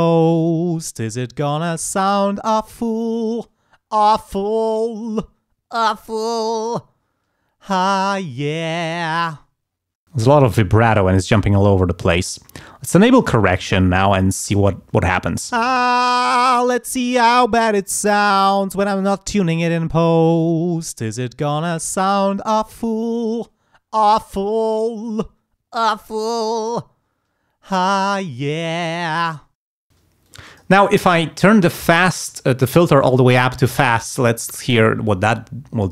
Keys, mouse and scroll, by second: 10.0 space, 13.2 click, 15.5 space, 29.6 space, 30.2 click, 31.5 click.